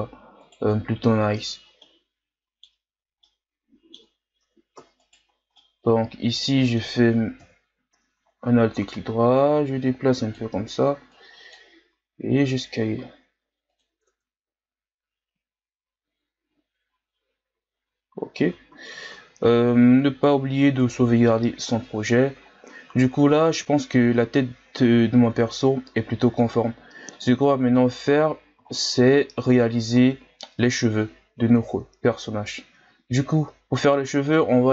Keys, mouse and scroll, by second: 0.4 alt+right click, 1.8-2.9 middle drag, 2.9-3.2 scroll down 4, 3.2-5.1 middle drag, 5.1 alt+shift+right click, 5.6-7.4 middle drag, 7.4 KP_1, 8.1-8.9 scroll up 4, 8.9-11.9 drag, 11.9 s, 14.1 Tab, 14.5-15.6 scroll down 5, 15.6-17.5 ctrl+scroll down 3, 17.5 ctrl+s, 18.7 ctrl+s, 19.1-20.0 scroll down 1, 20.0-20.5 scroll up 4, 20.5-21.7 scroll down 2, 21.7-22.3 scroll down 1, 22.3-23.1 scroll up 5, 23.3-25.7 scroll up 2, 25.7-26.3 scroll down 1, 26.3-27.8 scroll up 2, 27.8-28.2 shift+scroll down 5, 28.2 scroll up 2, 28.7 shift+scroll down 3, 29.0-30.0 scroll up 2, 30.0-30.7 scroll down 3, 30.7-31.1 scroll down 2, 31.1-31.7 shift+scroll up 1, 31.7-33.8 ctrl+scroll up 2.